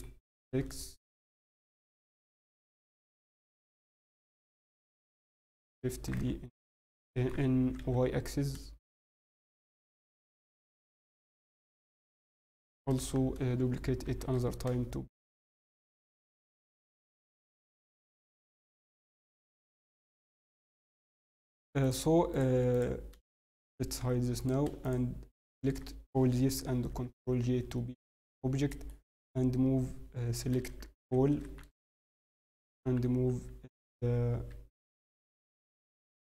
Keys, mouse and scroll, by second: 3.1 scroll, 3.4 shift+middle click, 3.4 scroll down 3, 3.7 scroll, 4.1 scroll up 3, 4.2 scroll, 4.5 scroll down 1, 5.9 scroll up 1, 7.6 g, 9.6 scroll, 9.8 scroll down 4, 9.8 z, 11.4 scroll, 12.7 scroll up 4, 12.9 scroll, 14.0 scroll up 1, 17.6 g, 19.4 z, 20.6 scroll, 20.7 middle click, 20.7 scroll down 1, 21.8 click, 22.3 shift+click, 22.7 click, 24.0 h, 24.3 click, 24.8 shift+click, 25.4 click, 26.6 ctrl+j, 27.5 Tab, 27.7 scroll, 27.9 scroll down 4, 27.9 middle click, 29.4 scroll, 30.5 scroll up 2, 30.5-33.0 typing, 35.1-35.5 scroll, 35.5 scroll down 5, 35.8 scroll.